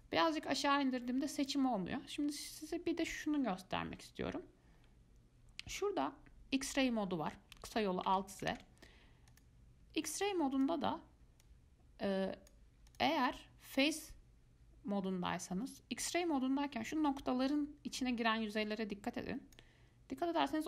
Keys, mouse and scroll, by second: 0.8 click, 7.8 alt+z, 8.4 alt+z, 8.7 alt+z, 9.5 click, 10.3 click, 11.6 click, 13.1 click, 14.1 click, 16.2 click.